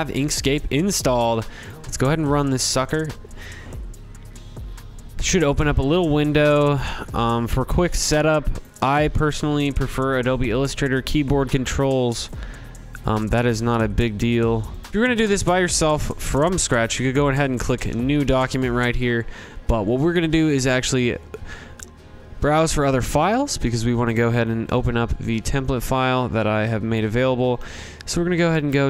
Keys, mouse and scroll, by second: 0.6-5.7 drag, 0.6 typing, 7.5 click, 9.1 click, 10.5 click, 10.6 click, 11.1 click, 11.9 click, 12.4 middle click, 12.6 middle click, 13.1 click, 13.7 click, 14.9 alt+Tab, 14.9 alt+click, 19.9 click, 22.7 click, 23.5-25.0 scroll, 25.1 click, 26.3 click, 26.5 click, 27.9 click, 28.0 click.